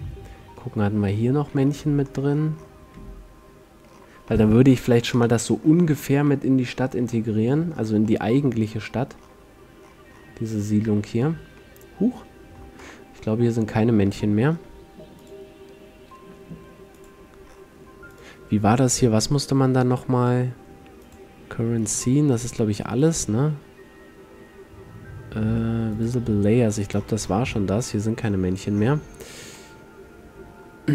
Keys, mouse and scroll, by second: 1.3 click, 1.7-2.3 middle drag, 4.0-4.7 middle drag, 5.7-8.7 middle drag, 11.1-15.3 middle drag, 15.3-17.2 drag, 17.6-18.3 middle drag, 18.3-20.2 drag, 21.9-23.1 middle drag, 23.1-25.0 drag, 27.1-29.8 middle drag, 29.3 a, 29.8-30.4 scroll up 3, 29.9 middle click, 30.1 middle click, 30.4-30.9 middle drag.